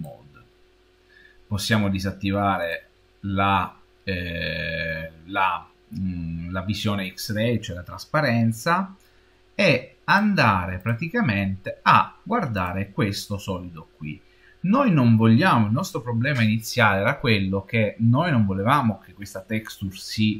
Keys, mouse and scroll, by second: 0.0-1.5 drag, 2.5 click, 7.5 middle click, 10.0 click, 10.7 click, 12.4 click.